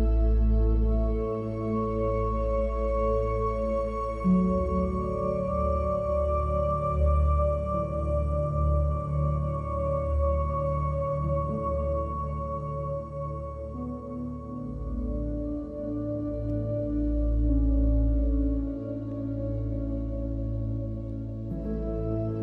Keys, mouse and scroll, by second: 0.0 middle drag, 0.3 click, 0.6 alt+click, 0.8 x, 1.0 shift+a, 1.3 Down, 2.0 click, 2.4-3.3 middle drag, 6.4 ctrl+s, 6.8 shift+a, 7.5 shift+a, 8.5 click, 9.0 ctrl+h, 9.1 g, 9.6 click, 9.7 ctrl+s, 12.6 click, 13.3 g, 13.6 click, 13.8 g, 14.0 click, 14.2 click, 14.4 shift+a, 15.3 shift+a, 16.5-17.2 drag, 17.4 click, 17.9 drag, 18.2 shift+a, 19.0 click, 19.1 click, 19.7 click, 20.2 middle click, 20.7 middle click, 20.8 g, 21.1 alt+middle click, 21.1 shift+d, 21.5 alt+click, 21.6 alt+middle drag, 21.7 click, 21.9 click, 22.3 shift+a.